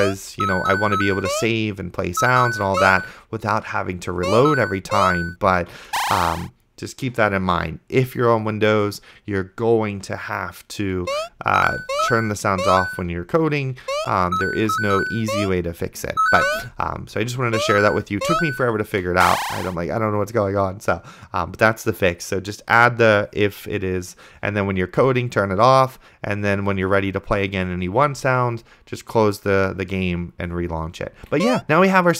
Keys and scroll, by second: 0.0-5.8 typing, 11.3 space, 11.4 a, 13.1-19.1 typing, 31.4 d, 31.6 space.